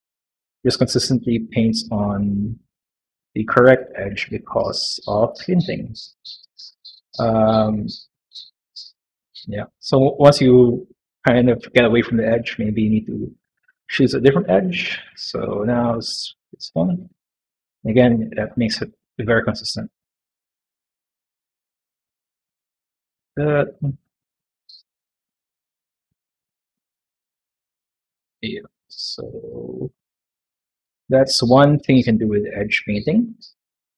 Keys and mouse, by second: 1.4 click, 2.0 click, 2.5 click, 3.3 click, 3.9 click, 4.2 middle click, 4.6 shift+middle click, 5.7 click, 6.2 click, 6.7 click, 7.3 middle click, 8.2 click, 9.9 click, 11.1 middle click, 12.1 middle click, 13.7 alt+click, 14.4 middle click, 16.1 click, 17.0 click, 17.4 click, 17.8 click, 18.1 middle click, 18.8 click, 19.5 click, 19.8 middle click, 21.1 click, 21.4 middle click, 22.3 click, 22.6 middle click, 23.5 middle click, 24.1 middle click, 25.5 click, 25.9 click, 26.1 middle click, 29.9 middle click, 30.4 middle click, 32.5 click, 33.4 middle click.